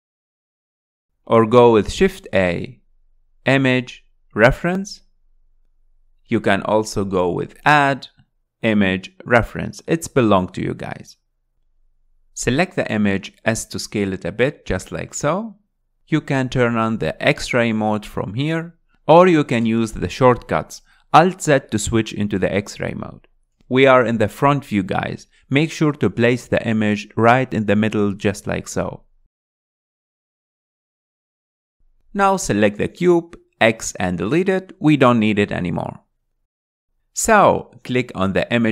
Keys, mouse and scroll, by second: 1.1 shift+a, 6.1-9.1 drag, 9.4-10.8 drag, 10.8 s, 12.9 g, 14.0 scroll up 4, 14.7 s, 16.3 g, 19.4 click, 21.8 alt+z, 22.5 alt+z, 23.0-23.6 scroll up 3, 23.9 alt+z, 24.2 alt+z, 25.9 s, 29.2 g, 30.1 s, 30.5 s, 31.5 g, 31.9 scroll down 5, 32.2-33.1 middle drag, 33.1 click, 34.1 z, 35.0 x, 36.5 click, 36.8-38.2 ctrl+drag, 38.2-38.6 scroll up 3, 38.6 click.